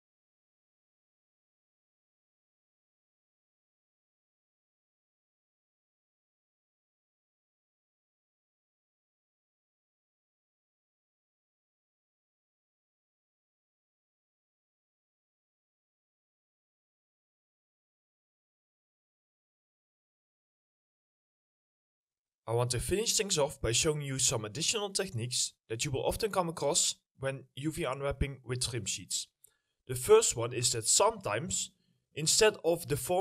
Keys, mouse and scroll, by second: 0.1 ctrl+click, 0.7 ctrl+click, 1.7 double click, 2.8 ctrl+click, 3.2 middle click, 3.2 ctrl+click, 3.3 double click, 4.7 middle click, 5.6 double click, 6.7 middle click, 7.2 alt+click, 8.0 double click, 9.4 ctrl+click, 9.7 scroll up 1, 9.9 middle click, 10.8 ctrl+click, 11.2 middle click, 11.2 ctrl+click, 11.6 scroll up 1, 11.7 alt+middle click, 12.9 double click, 13.0 scroll down 2, 13.0 middle click, 13.2 middle click, 14.2 ctrl+click, 14.6 scroll up 1, 14.8 alt+middle click, 15.3 alt+click, 16.1 double click, 16.2 middle click, 20.2 middle click, 20.6 scroll down 1, 21.0 scroll up 1, 21.1 middle click, 21.5 alt+middle click, 32.7 middle click.